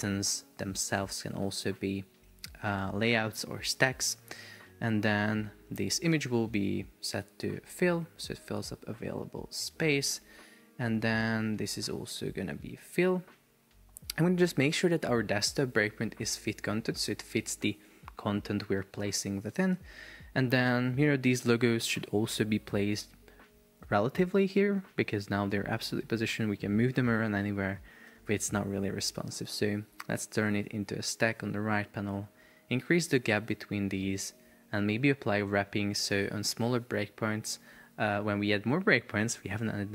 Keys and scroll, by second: 17.2 shift+super+4, 17.9 Escape, 28.1 super+z, 33.4 shift+Up.